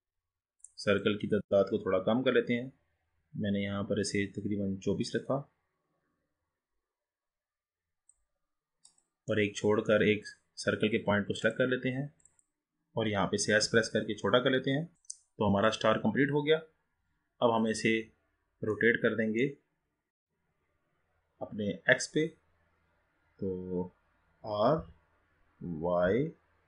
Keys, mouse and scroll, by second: 1.0-4.2 drag, 8.8 click, 9.3-10.2 middle drag, 10.2-11.4 scroll up 3, 11.4-12.4 drag, 13.8 s, 14.9-15.8 scroll up 2, 17.8 click, 18.9-21.9 middle drag, 24.8 r.